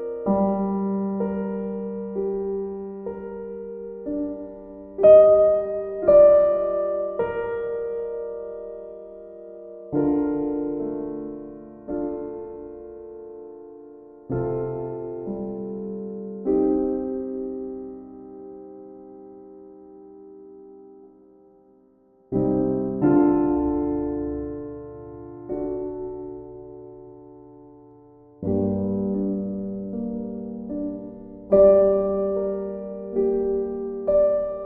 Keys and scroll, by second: 5.9 ctrl+z, 14.2 ctrl+z, 21.7 ctrl+z, 27.8 ctrl+z.